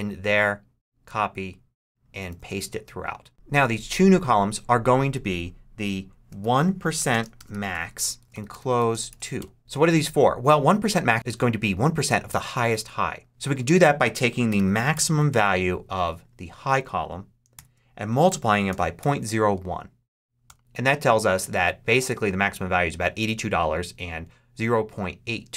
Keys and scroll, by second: 0.0 Return, 0.9 super+c, 2.2 super+v, 6.3-9.5 typing, 14.1-15.3 typing, 17.4-19.6 typing, 20.3 Return.